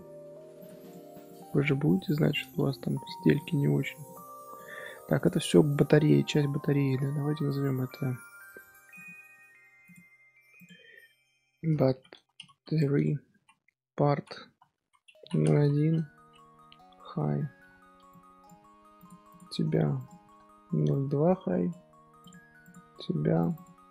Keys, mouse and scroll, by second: 0.5 click, 0.8-2.1 right drag, 2.1 click, 3.6 scroll down 1, 3.8 scroll up 1, 4.0 click, 4.3 middle drag, 4.5 scroll down 1, 4.7-5.1 scroll up 3, 5.1 click, 5.6 click, 5.9-8.9 middle drag, 8.9 click, 9.8 click, 10.5-12.5 drag, 12.5 t, 19.2 click, 19.9-22.3 drag, 22.6 click, 23.4-23.9 drag.